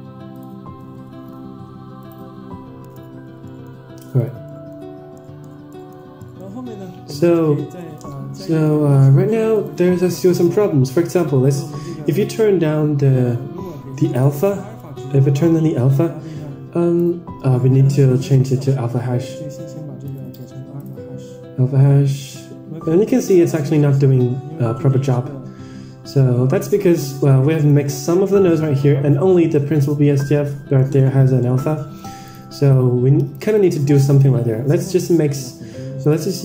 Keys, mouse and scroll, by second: 0.9 BackSpace, 3.4 middle click, 3.7-4.1 scroll down 4, 4.1 click, 4.4 middle click, 4.9 scroll up 3, 5.0 middle drag, 5.5-5.9 scroll down 3, 5.6 middle drag, 6.1 middle drag, 7.0 Tab, 7.7 middle click, 8.1 scroll up 5, 8.4 middle click, 9.4 click, 10.6 middle click, 11.4 scroll up 1, 14.7-17.2 drag, 17.9 n, 20.0-21.2 drag, 22.2 n, 23.7-27.3 drag, 28.7-29.4 scroll down 10, 29.7-30.4 middle drag, 30.7 middle drag, 31.4-31.7 scroll up 5, 31.7 middle drag, 32.7-33.2 drag, 33.7 middle click, 34.4 shift+a.